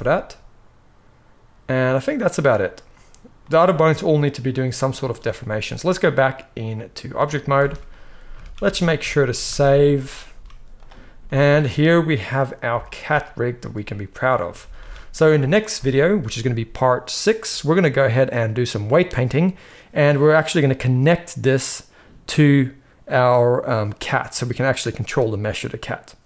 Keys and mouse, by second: 5.7-26.2 drag, 7.5 alt+a, 8.3 ctrl+s, 8.5 ctrl+s, 9.4 ctrl+s, 9.6 ctrl+s, 10.2 z, 14.5 ctrl+s, 14.8 ctrl+s.